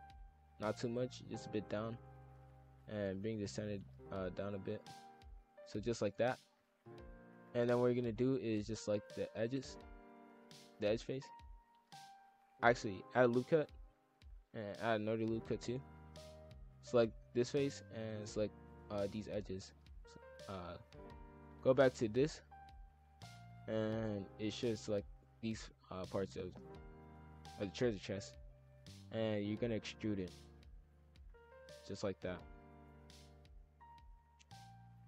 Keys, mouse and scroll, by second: 2.1 ctrl+r, 3.1 click, 4.9-5.9 middle drag, 5.9 scroll down 1, 6.1 a, 6.5 middle click, 6.9 scroll up 1, 7.4 click, 7.9 scroll up 1, 8.0 middle click, 8.8 alt+click, 9.3 middle click, 9.9 scroll down 1, 10.2-11.8 middle drag, 11.8 ctrl+r, 14.4 ctrl+r, 16.9 alt+shift+click, 18.2 alt+shift+click, 18.7 alt+shift+click, 20.1 click, 20.6 shift+f, 23.4 shift+f, 29.7 click, 30.2 e, 30.7 s, 32.3 shift+f.